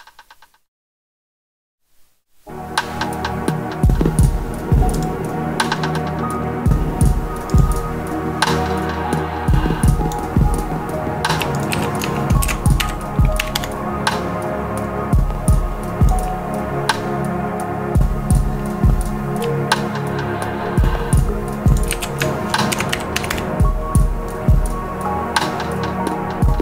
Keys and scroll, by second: 11.7 super+a, 12.3 shift+super+d, 12.7 shift+3, 13.3 4, 13.5 Return, 21.8 super+a, 22.6 shift+super+d, 22.8 shift+3, 23.2 Return.